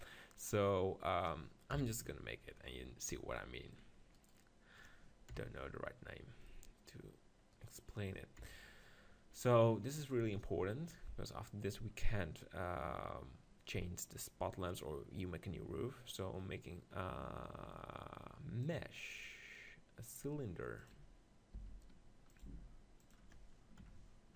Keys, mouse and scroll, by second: 0.0-2.0 middle drag, 1.7 KP_7, 3.4 middle click, 4.2-5.2 drag, 5.2 right click, 5.8 KP_7, 6.5-7.6 middle drag, 7.6 click, 8.4 right click, 8.4 KP_7, 8.5 click, 10.3-11.9 drag, 16.3-18.0 drag, 21.5 s, 22.4-24.3 drag, 22.5 g.